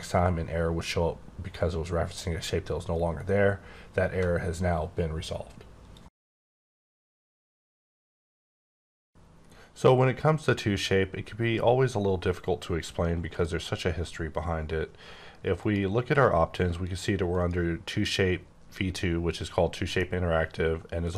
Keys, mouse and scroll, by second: 15.5 click, 17.3 click, 20.0 middle click.